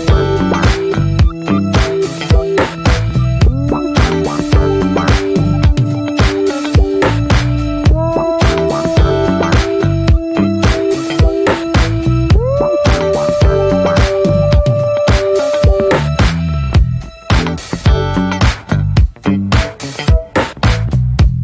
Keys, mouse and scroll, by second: 0.5-1.3 scroll down 1, 1.3 ctrl+s, 2.3-3.2 middle drag, 3.2 scroll up 1, 3.4 Tab, 3.5 scroll down 1, 3.6 middle click, 3.7 scroll up 1, 3.8 scroll down 1, 3.9 shift+middle drag, 4.2-4.9 scroll up 1, 4.9 drag, 5.1 middle drag, 5.4 ctrl+s, 6.1 Tab, 7.1 click, 7.4 ctrl+s, 7.6-8.1 shift+middle drag, 8.1 ctrl+s, 8.6-11.5 shift+middle drag, 11.5 click, 12.0 click, 12.2 /, 12.5 middle click, 13.0 ctrl+s, 13.2 scroll down 2, 13.4 middle drag, 13.7 ctrl+s, 15.0 middle click, 15.5 ctrl+s, 16.0-17.1 middle drag, 17.1 ctrl+s, 17.3 middle drag, 17.6 Tab, 17.8 middle click, 18.0 scroll up 2, 18.2-19.3 shift+middle drag, 19.3 a, 19.8 scroll down 2, 20.0 right click, 21.1 scroll down 2, 21.3-21.4 middle drag.